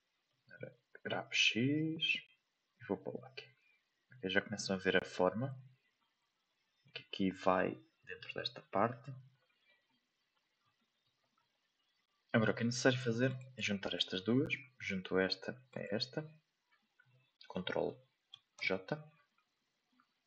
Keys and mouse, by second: 0.8 g, 6.1-6.8 middle drag, 7.7-8.2 middle drag, 9.5 middle click, 10.7-11.0 middle drag, 13.2 right click, 13.8 right click, 15.7 shift+right click.